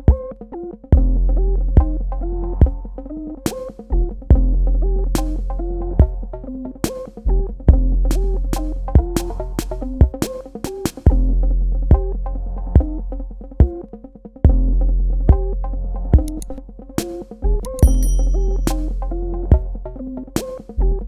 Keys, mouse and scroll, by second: 6.8 click, 19.1 click.